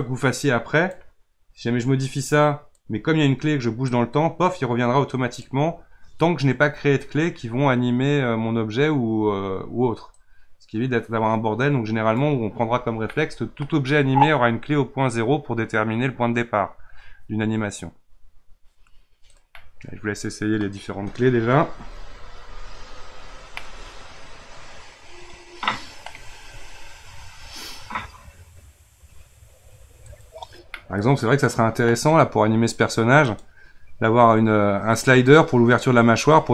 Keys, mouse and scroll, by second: 0.0-6.9 drag, 10.2-12.7 drag, 12.7-13.1 scroll down 1, 13.1-16.1 middle drag, 19.3 click, 19.5-22.7 middle drag, 23.5-26.6 middle drag, 30.0 click, 30.7-33.2 middle drag, 33.2 click.